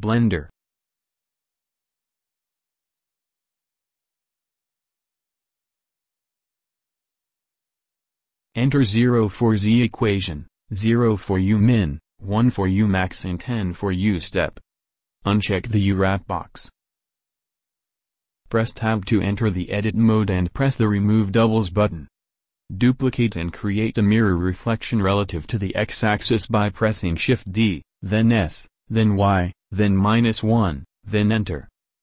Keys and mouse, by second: 0.7-2.0 drag, 4.5-6.0 drag, 7.6-10.3 drag, 12.1-13.4 drag, 13.6-14.9 drag, 16.1-18.5 drag, 18.5 Tab, 25.4 shift+d, 26.7 s, 31.8 alt+Tab.